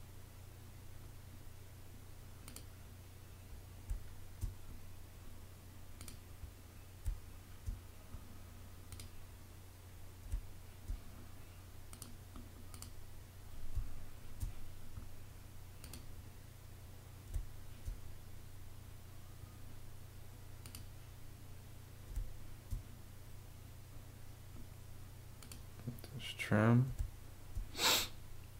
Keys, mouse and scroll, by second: 3.8 space, 6.9 space, 10.2 space, 13.6 space, 17.2 space, 22.0 space, 26.8 space.